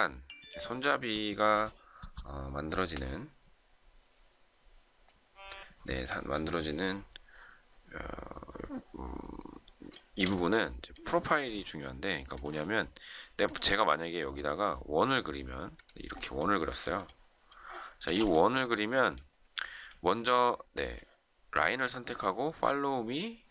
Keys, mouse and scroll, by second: 9.9 shift+middle click, 18.0 space.